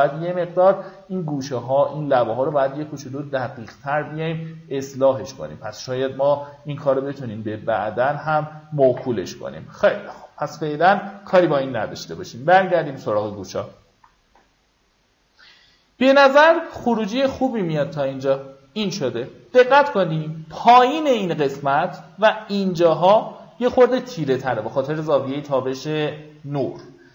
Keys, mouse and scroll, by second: 2.2 ctrl+z, 2.6 alt+right click, 4.2-8.4 drag, 8.6 q, 9.9-10.3 alt+scroll down 2, 10.9 ctrl+d, 12.0 click, 13.1 alt+scroll up 1, 17.2-18.4 drag.